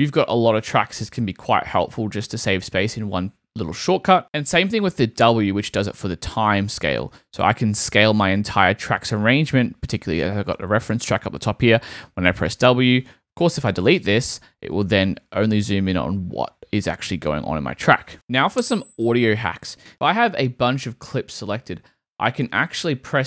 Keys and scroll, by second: 7.0 w, 13.6 BackSpace, 13.9 w.